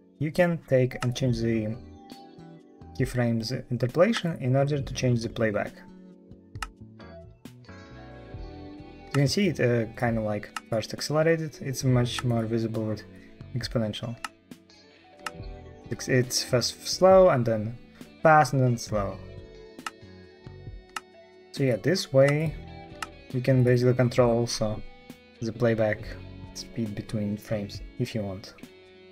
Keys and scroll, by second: 6.5 space, 9.0 space, 14.1 space, 15.1 space, 19.7 space, 20.8 space.